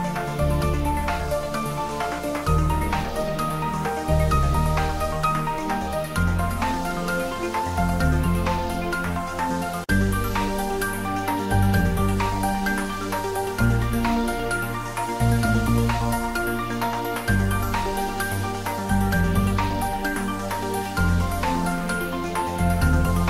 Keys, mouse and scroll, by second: 0.5 ctrl+r, 2.1 click, 3.0-4.7 middle drag, 5.1 ctrl+r, 5.8 click, 7.2 Tab, 7.7 shift+middle click, 8.0 Tab, 8.6 ctrl+middle click, 9.5 ctrl+r, 9.8 click, 11.0 Tab, 11.1-12.3 middle drag, 12.3 ctrl+r, 12.8 Tab, 13.6 ctrl+r, 14.4 click, 15.3 ctrl+b, 17.3-17.7 scroll down 1, 19.4 click, 19.7-21.0 middle drag, 21.0 s.